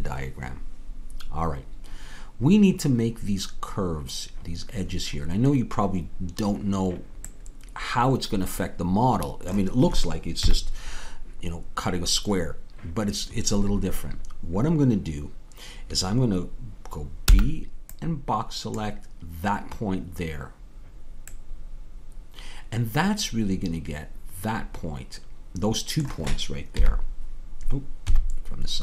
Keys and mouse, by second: 7.3-10.4 middle drag, 10.4 KP_3, 17.2 b, 21.3-22.3 middle drag, 26.8 KP_1, 28.0 KP_3.